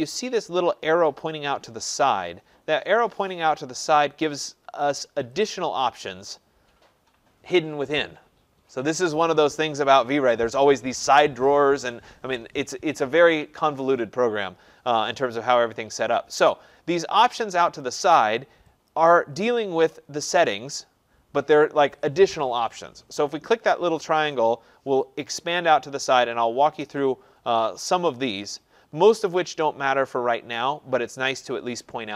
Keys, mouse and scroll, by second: 5.5-10.5 drag, 17.8 click, 18.9 click, 24.5 click, 25.2 click.